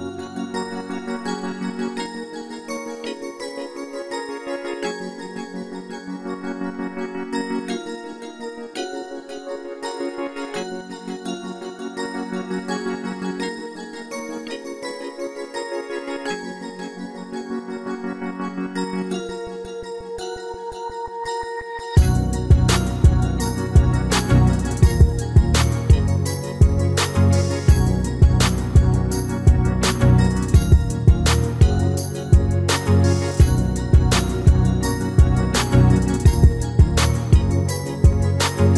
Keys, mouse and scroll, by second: 0.4-2.3 drag, 4.2 KP_1, 4.7 middle click, 5.6 KP_3, 6.8 Tab, 7.2-10.7 middle drag, 10.4 e, 15.7-18.6 middle drag, 18.0 a, 18.3 a, 19.3 s, 22.8-26.5 middle drag, 25.8 s, 27.2-31.2 middle drag, 31.3-33.1 drag, 34.5-38.7 drag, 37.8-38.7 middle drag.